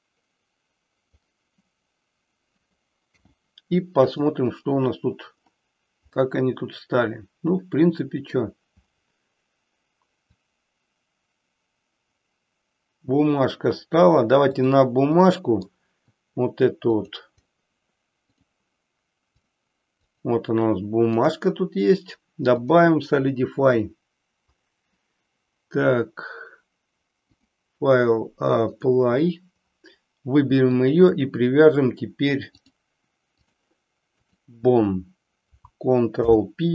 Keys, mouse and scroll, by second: 3.1 n, 4.0 click, 6.1-8.4 middle drag, 10.2-13.9 drag, 14.6 click, 15.5 middle click, 19.4 click, 20.2 click, 22.6-24.8 drag, 27.5-28.9 drag, 30.7 shift+click, 32.5-33.6 drag, 34.4 click, 36.2 ctrl+p.